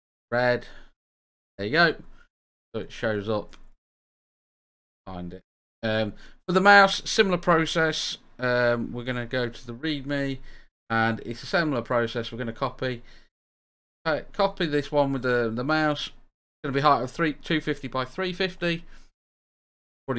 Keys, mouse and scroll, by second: 1.0-5.0 typing.